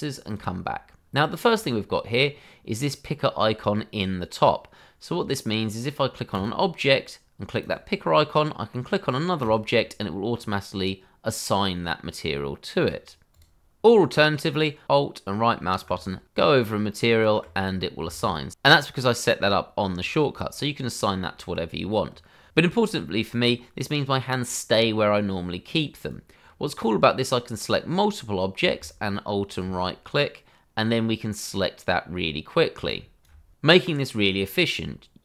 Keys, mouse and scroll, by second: 1.4 scroll down 1, 1.6-2.0 scroll up 1, 6.3 click, 12.8 click, 14.8 alt+right click, 16.0 alt+right click, 22.5 scroll down 1, 26.0 click, 28.8 alt+right click, 32.8 alt+right click.